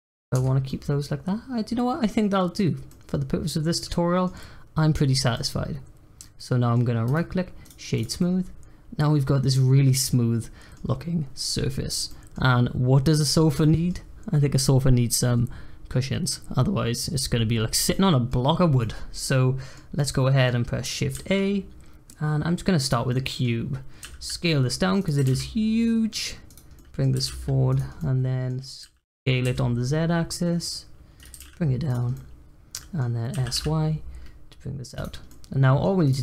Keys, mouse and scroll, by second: 0.3 Tab, 0.6-7.0 middle drag, 7.0-7.9 right drag, 7.9 click, 8.1-11.3 middle drag, 12.0-16.7 middle drag, 17.9-21.1 middle drag, 21.1 shift+a, 23.1-24.0 middle drag, 24.0 s, 25.1 g, 26.8 middle click, 27.1 g, 27.9 middle click, 28.8 s, 31.3 g, 32.1-33.3 middle drag, 33.3 s, 35.3-36.0 middle drag, 36.0 click.